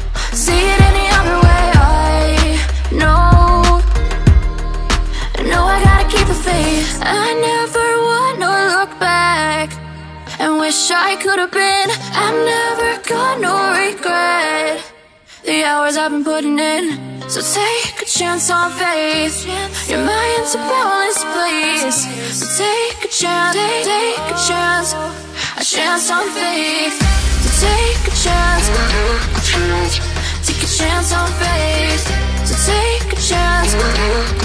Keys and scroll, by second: 4.0 ctrl+t, 16.4 BackSpace, 19.9-24.7 typing.